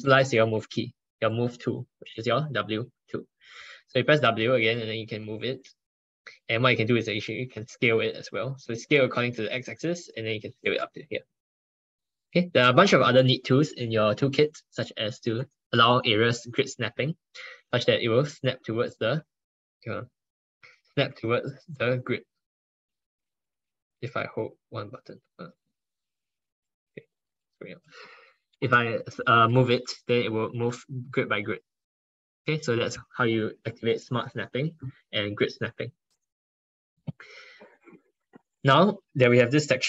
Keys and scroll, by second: 3.8 ctrl+1, 4.2 ctrl+1, 23.7 ctrl+z, 27.2 ctrl+z.